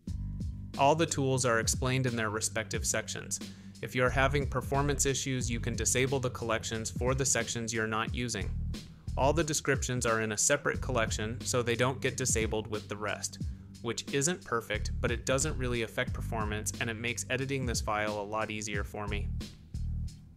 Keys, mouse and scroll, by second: 18.1 click.